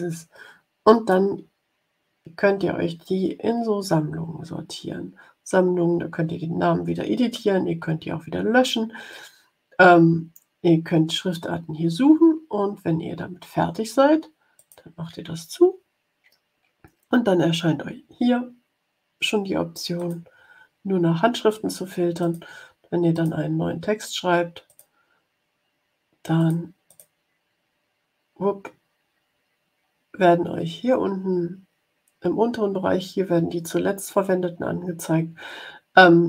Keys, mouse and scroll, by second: 14.5 click, 19.9 click, 22.1 click, 23.1 click, 24.6 click, 26.3 click, 26.8 click.